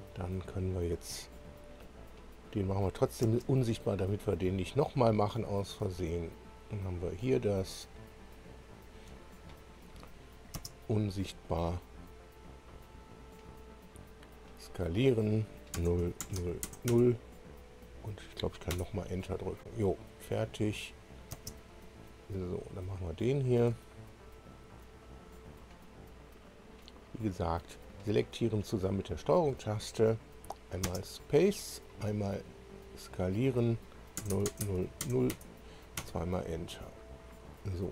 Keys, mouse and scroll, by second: 1.8-2.5 scroll down 4, 2.8 click, 3.2 space, 4.3-4.6 scroll up 1, 5.5 click, 6.6 ctrl+click, 7.4 ctrl+click, 8.6 ctrl+click, 11.1 space, 12.7 click, 15.7 0, 16.0 Tab, 16.2 0, 16.6 Tab, 16.8 0, 16.9 Return, 18.7 Return, 20.8 click, 21.9 space, 23.3 click, 24.4 ctrl+click, 25.5 ctrl+click, 26.4 ctrl+click, 27.4 ctrl+click, 28.8 ctrl+click, 31.4 space, 32.6 click, 34.1 0, 34.3 Tab, 34.6 0, 35.0 Tab, 35.3 Return, 35.3 0.